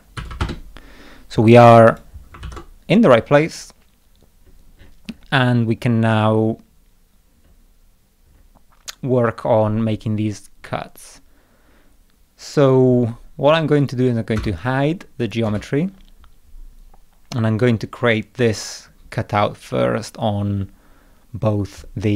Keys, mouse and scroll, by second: 1.9 click, 2.4 ctrl+s, 3.6 middle click, 4.3 middle click, 4.5 middle click, 4.8 middle click, 5.1 middle click, 5.5 middle click, 5.8 middle click, 7.5 scroll down 2, 8.0 scroll down 2, 8.3-8.6 scroll up 2, 9.0 scroll up 2, 13.8 click, 14.4 space, 15.2 click, 15.5 space.